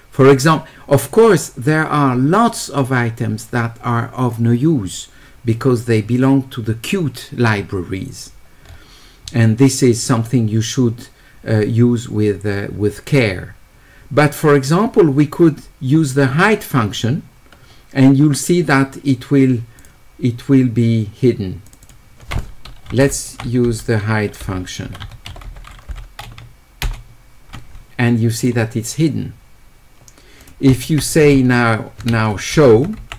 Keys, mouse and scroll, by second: 1.2 middle click, 1.2-1.6 scroll down 1, 8.6 middle click, 9.2-10.5 middle drag, 12.7 middle click, 21.7 click, 21.8 click, 24.6-25.5 typing, 30.4 click.